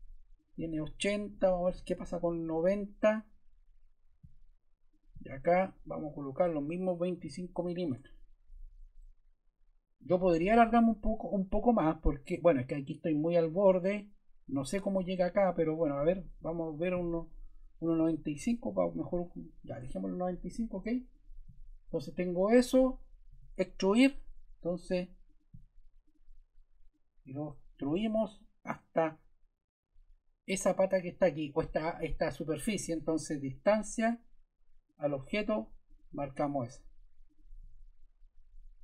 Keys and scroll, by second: 1.4-2.3 typing, 2.4 Return, 6.8-7.7 typing, 7.8 Return, 16.3 Escape, 17.9 9, 18.3 5, 18.7 Return, 23.2 e.